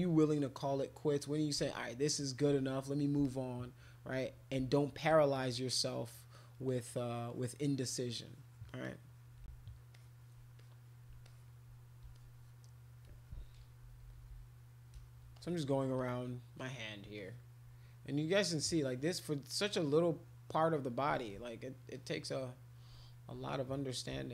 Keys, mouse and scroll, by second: 1.2 click, 1.7 alt+click, 2.4 alt+click, 3.2 alt+click, 5.1-6.5 shift+drag, 6.7 shift+click, 7.3 shift+click, 7.6 shift+click, 7.9 shift+click, 8.5 shift+click, 8.7 shift+click, 8.8 shift+click, 9.1 shift+click, 9.9 alt+click, 10.6 click, 11.2 alt+click, 12.1 alt+click, 13.8 [, 14.0 [, 14.1 [, 14.3 [, 15.3 alt+click, 16.0 click, 17.1 alt+click, 18.4 click, 18.8 click, 19.2 click, 19.7 click, 19.9 click, 21.3 alt+click, 21.9 click, 22.9 alt+click, 23.4 click.